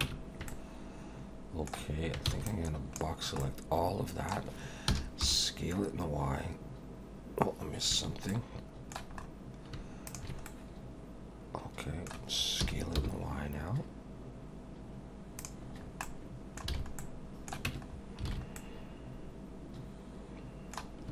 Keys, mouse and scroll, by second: 0.0 Tab, 0.5 middle click, 2.3 b, 3.4 middle click, 4.9 s, 8.3 middle click, 9.2 scroll up 3, 10.1 shift+click, 10.4 middle click, 12.6 s, 15.8 scroll down 3, 16.0 middle click, 16.7 alt+a, 17.0 middle click, 17.7 Tab, 17.9 scroll down 3, 18.3 alt+a, 18.6 middle click.